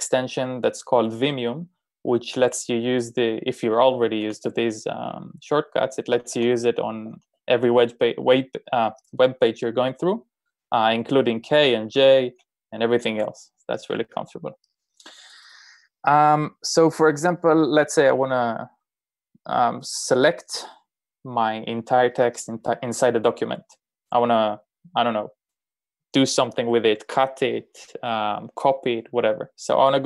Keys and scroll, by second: 2.3 typing, 4.8 shift+g, 6.2-7.4 typing, 10.2 typing.